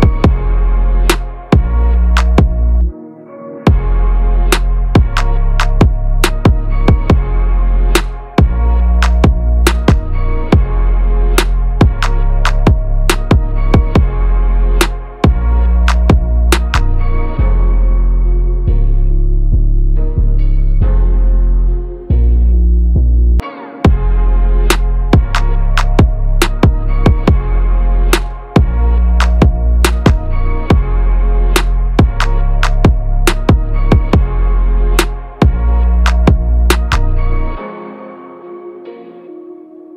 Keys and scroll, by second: 15.3 ctrl+a, 31.5 ctrl+=, 31.9 ctrl+space, 34.1 ctrl+-, 34.6 ctrl+-.